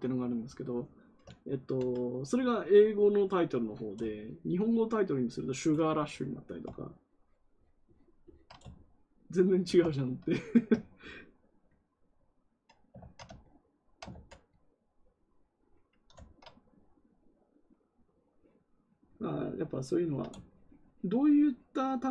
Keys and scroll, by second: 12.9 ctrl+z, 14.0 ctrl+z.